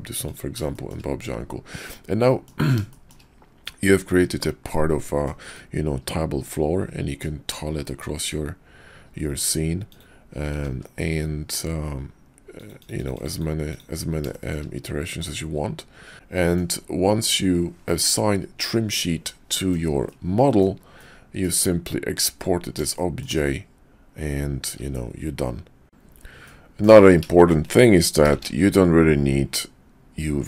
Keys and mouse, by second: 0.7 shift+drag, 2.2 drag, 2.9 shift+drag, 3.7-5.3 middle drag, 5.5-7.2 middle drag, 9.9-10.4 drag, 10.5 ctrl+`, 12.9-13.9 drag, 14.3 shift+click, 15.2 middle click, 15.3-16.4 drag, 16.4 middle click, 17.9-18.7 drag, 19.5 shift+drag, 20.1-20.6 drag, 20.9-21.3 drag, 21.3 middle click, 22.9 shift+middle click, 26.5-26.8 middle drag, 27.4 shift+middle click, 28.5 shift+a.